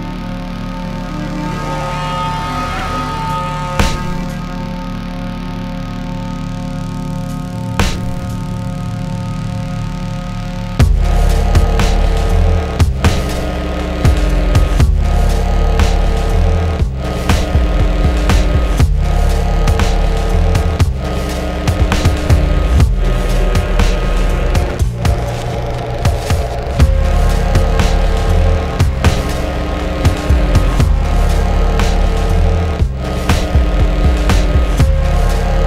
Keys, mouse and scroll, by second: 6.6 click, 8.8 click.